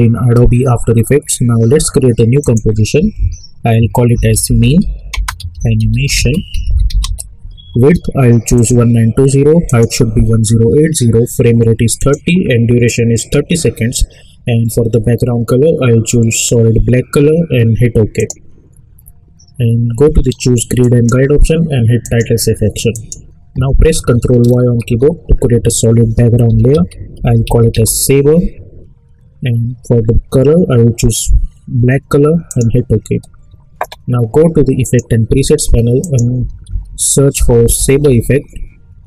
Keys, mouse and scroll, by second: 2.4 click, 3.8-7.5 typing, 8.5 click, 12.0 click, 18.1 click, 20.8 click, 24.8 ctrl+y, 26.2-28.2 typing, 32.4 click, 34.8 click, 36.2-38.5 typing.